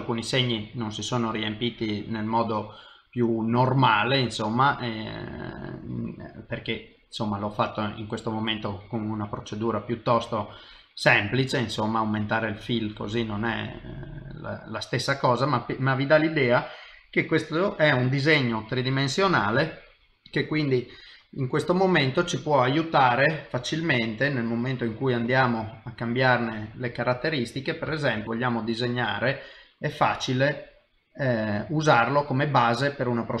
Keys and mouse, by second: 0.2 middle click, 7.1 middle click, 10.4 middle click, 12.7 click, 15.0 middle click, 18.0 middle click, 20.7 middle click, 23.9 click, 26.9 middle click, 28.2 shift+middle click, 31.7 middle click, 33.3 click.